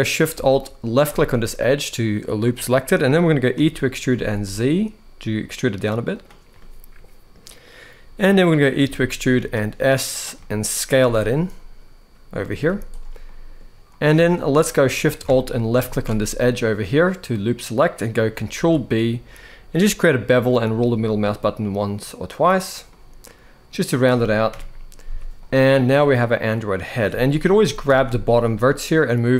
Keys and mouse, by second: 1.2 middle click, 3.3 e, 3.8 z, 5.8 click, 6.3 middle click, 8.5 e, 9.1 s, 9.8 click, 10.1 middle click, 10.7 z, 12.4 z, 13.0 middle click, 13.6 middle click, 14.0 alt+a, 15.5 alt+shift+click, 17.2 middle click, 18.3 ctrl+b, 22.6-23.7 middle drag, 24.2 KP_1, 24.8 KP_4, 24.8 z, 25.7 click, 27.2 g, 27.6 z.